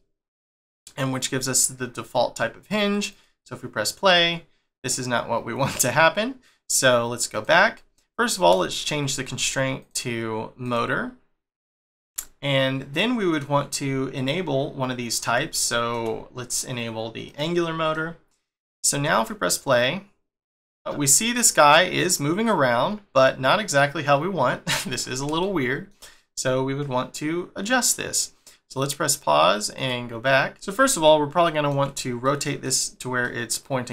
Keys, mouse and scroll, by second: 3.1 click, 6.7 click, 7.3 click, 7.9-8.5 scroll up 1, 8.5 shift+middle click, 9.8 click, 12.2 shift+middle click, 15.6 shift+middle click, 17.2 click, 17.9 middle click, 19.4 click, 21.0 scroll down 1, 25.0 scroll up 1, 25.4 shift+middle click, 29.0 click, 29.7 click, 30.5 middle click, 33.2 middle click.